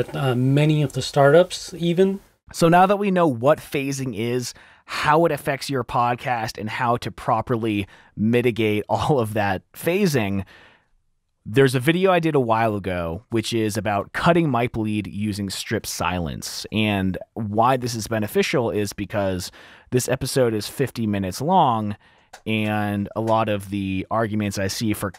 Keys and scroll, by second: 0.9 r, 1.3 F7.